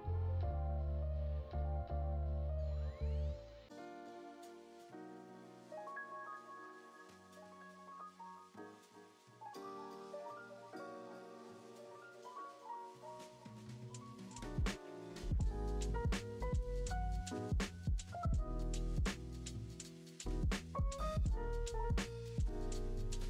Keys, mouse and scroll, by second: 5.9-7.5 shift+right drag, 7.5-9.9 middle drag, 9.9 shift+d, 12.1 shift+s, 15.1-20.7 middle drag, 20.7-21.5 scroll down 2, 21.5-23.2 middle drag.